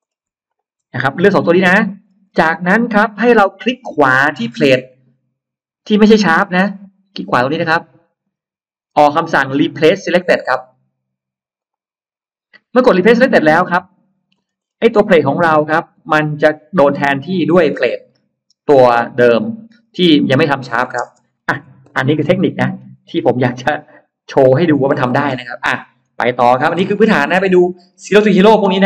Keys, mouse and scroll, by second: 0.3 shift+click, 1.0-2.2 scroll down 3, 8.1 right click, 11.4 click, 13.7 middle click, 13.7-14.8 scroll up 2, 14.4 middle click, 15.8 click, 16.9 click, 21.0 space, 21.1 middle click, 22.0 Escape, 22.0 middle click, 22.4 middle click, 23.9 click, 24.1 click, 25.0 click, 25.8-26.6 scroll down 1, 26.1 middle click, 27.0 middle click, 27.0-27.7 scroll down 1, 28.0 middle click, 28.2 scroll down 1, 28.3 middle click.